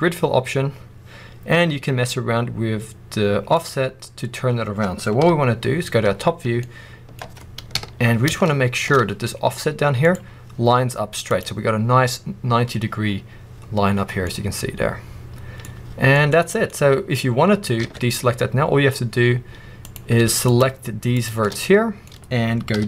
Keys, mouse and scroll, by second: 3.5 click, 5.9 scroll, 6.5 middle click, 9.9-13.9 drag, 13.9 scroll, 14.1-15.2 middle drag, 15.9 scroll, 16.0 middle click, 16.6-17.4 scroll, 17.7 alt+a, 19.7 click, 20.4 shift+click, 21.0 shift+click, 21.5 middle click, 22.0-22.4 scroll up 2, 22.7 g.